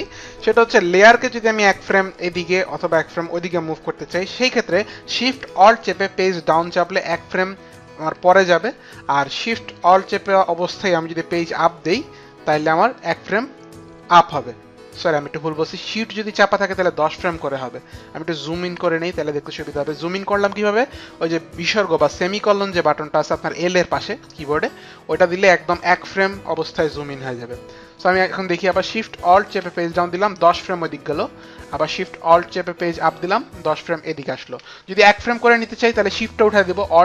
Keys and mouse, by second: 0.3 click, 9.1 alt+shift+Page_Down, 11.6 alt+shift+Page_Up, 13.3 alt+shift+Page_Up, 29.6 alt+shift+Page_Down, 32.8 alt+shift+Page_Up.